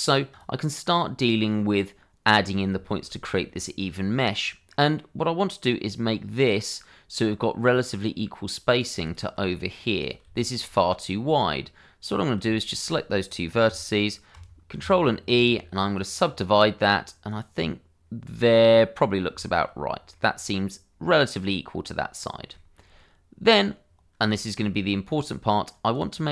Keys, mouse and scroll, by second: 0.3 click, 1.5 middle click, 2.8 shift+middle click, 3.1-3.4 scroll up 1, 3.4 middle click, 8.7 click, 9.0 shift+click, 10.3 shift+click, 12.1 click, 12.5 shift+click, 14.8 ctrl+e, 15.9 click, 18.4 middle click, 19.4 shift+middle click, 20.1 middle click, 22.5 shift+middle click, 22.9 middle click, 24.0 scroll down 1, 24.2 shift+middle click, 25.9 click.